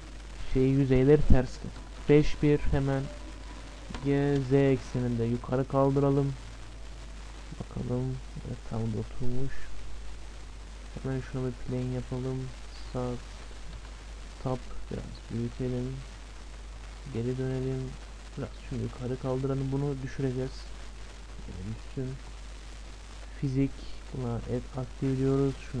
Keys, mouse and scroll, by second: 1.9 KP_5, 2.0 KP_1, 4.0 g, 7.1-8.3 scroll up 1, 8.3-9.3 scroll up 1, 9.3-9.8 scroll up 1, 9.8-13.9 middle drag, 11.1 shift+a, 13.0 Tab, 13.9 scroll up 1, 13.9 s, 14.0-15.3 scroll down 1, 15.3-15.6 scroll down 1, 15.6 Tab, 15.7-16.9 scroll up 1, 16.9-19.2 middle drag, 17.9-20.7 right drag, 18.8-20.7 drag, 20.8-22.6 middle drag, 22.6-23.2 scroll down 1, 23.4-25.8 drag.